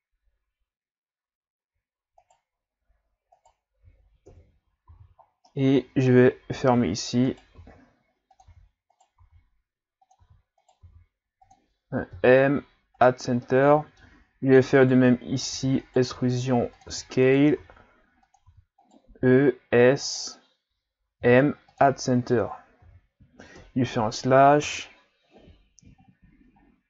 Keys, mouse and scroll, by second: 2.2 alt+right click, 3.3 alt+right click, 4.3 KP_Divide, 4.9 z, 5.3 scroll down 1, 5.4-6.8 middle drag, 6.8-10.8 typing, 12.1 m, 13.4-14.8 middle drag, 14.8 alt+right click, 15.6-19.2 typing, 21.2 m, 22.3 Tab, 22.8 a, 23.6 KP_Divide, 24.8-25.9 scroll down 5, 26.0-26.6 scroll up 3.